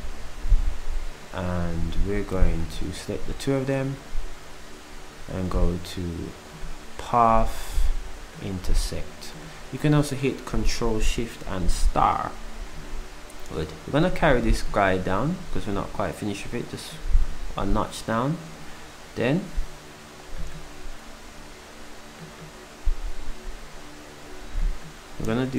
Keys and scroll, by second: 0.3 s.